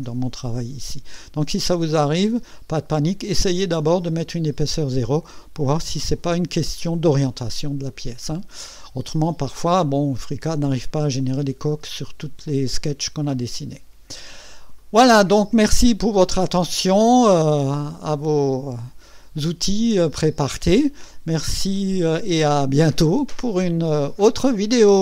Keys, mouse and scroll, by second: 2.7-3.8 drag, 6.7-7.9 drag, 13.9 scroll down 1, 14.8-20.7 drag, 20.9-21.4 scroll up 2, 21.7 right click.